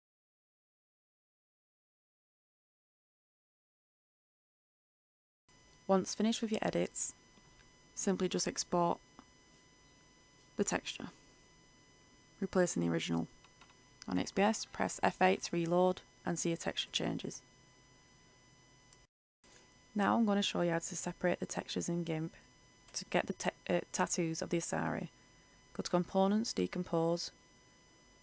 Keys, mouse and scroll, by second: 3.4 ctrl+s, 5.0 click, 5.9 ctrl+shift+e, 9.4 click, 10.0 Return, 11.6 Return, 13.3 click, 14.4 F8, 23.2 ctrl+alt+F10, 23.4-28.2 drag.